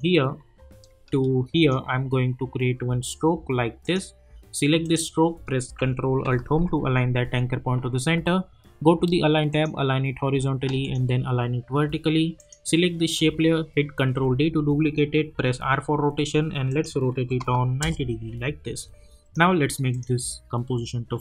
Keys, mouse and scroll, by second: 0.3-0.7 scroll down 1, 1.5 shift+click, 6.4 ctrl+alt+Home, 9.5 click, 14.0 ctrl+d, 15.3 r, 16.7 click, 17.8 Return, 19.2 click.